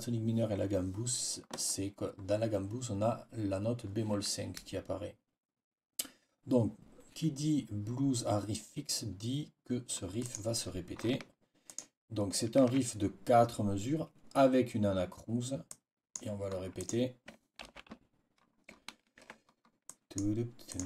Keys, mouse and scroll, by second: 10.1 click, 11.6 shift+click, 15.6 click, 15.7-16.2 scroll up 6, 15.8 click, 16.0 click, 16.7 scroll up 2, 17.5 ctrl+v, 19.1 ctrl+z, 19.8 click, 20.6 click.